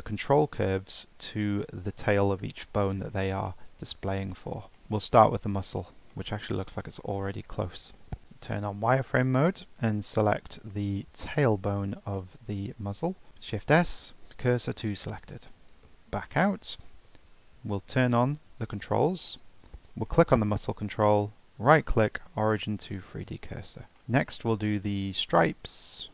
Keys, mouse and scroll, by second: 3.5-4.0 shift+middle drag, 4.0-4.3 scroll up 1, 4.3-5.4 middle drag, 5.4 scroll up 1, 5.7-6.5 middle drag, 6.5-7.9 scroll up 1, 7.9 scroll up 1, 8.2 shift+middle click, 8.5 click, 9.2 shift+middle click, 9.6-10.2 scroll up 2, 10.2 click, 11.3 click, 12.2 shift+middle click, 13.3 shift+s, 15.9-18.0 middle drag, 18.0 click, 19.3-19.7 shift+middle drag, 19.7-20.1 scroll up 1, 20.1-21.6 middle drag, 21.6-24.0 right drag, 24.0-24.4 shift+middle drag, 24.4 click, 24.8 click.